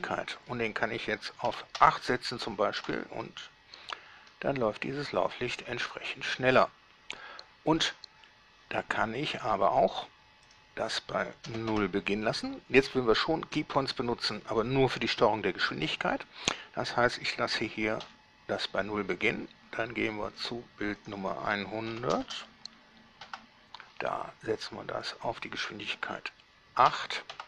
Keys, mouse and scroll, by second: 0.0 click, 1.8 8, 2.0 Return, 3.0 alt+a, 8.0 Escape, 10.7 click, 11.7 0, 11.9 Return, 18.3 i, 20.6 click, 21.3 click, 22.1 1, 22.3 0, 22.5 0, 23.5 Return, 25.3 click, 27.1 8.